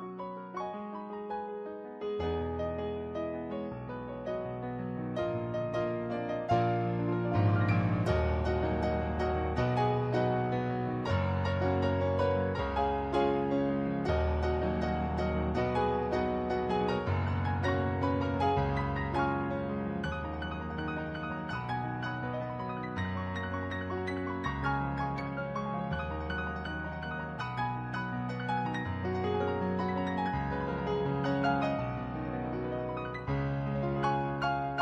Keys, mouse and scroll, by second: 0.0 ctrl+z, 0.5 ctrl+z, 0.7 ctrl+z, 1.5 ctrl+z, 6.9 ctrl+z, 7.2 ctrl+z, 7.8 ctrl+z, 8.7 ctrl+z, 10.0 ctrl+z, 10.8 ctrl+z, 12.8 ctrl+z, 13.5 ctrl+z, 19.4 ctrl+z, 19.8 ctrl+z, 20.3 ctrl+z, 22.5 ctrl+z, 24.1 ctrl+z, 26.4 ctrl+z, 26.7 ctrl+z, 27.0 ctrl+z, 27.8 ctrl+z, 29.8 ctrl+z, 31.7 ctrl+z, 32.2 ctrl+z, 33.0 ctrl+z, 33.9 ctrl+z, 34.4 ctrl+z.